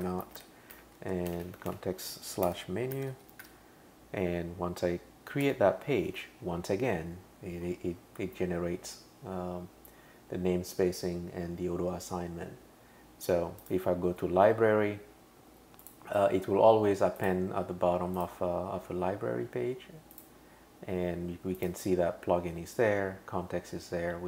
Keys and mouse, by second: 0.0-3.9 typing, 5.4 Return, 13.6 click, 15.8 click, 17.2 click, 18.2 click, 20.1 click, 21.6 click.